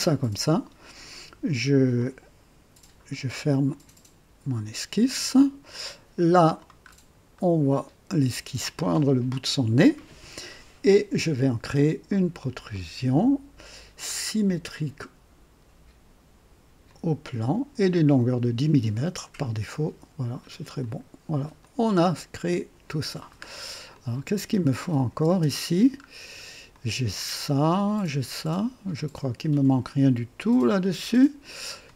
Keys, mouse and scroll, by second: 1.9 click, 3.6 click, 5.1-6.7 drag, 6.8 scroll up 2, 7.3-7.9 right drag, 9.0 scroll up 2, 12.6 click, 16.8 click, 17.9-19.7 drag, 20.7 click, 21.6-23.1 drag, 23.4-23.7 scroll down 2, 23.9 click, 24.8 click, 25.2 space, 26.0 scroll up 1, 26.7-31.9 drag.